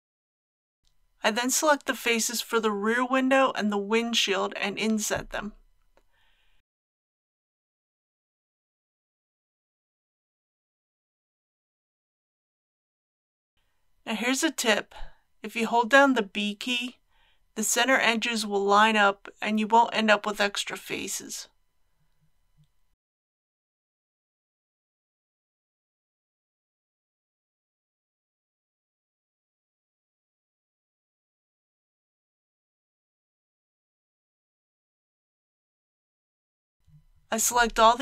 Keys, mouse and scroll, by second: 1.0 middle click, 2.3 click, 2.9 middle click, 5.4 shift+click, 6.3-9.5 middle drag, 10.3 i, 13.5 ctrl+z, 13.6 i, 18.8 click, 19.3 ctrl+z, 23.0-24.9 typing, 28.6 typing, 32.6 typing, 35.6 click, 36.8 3.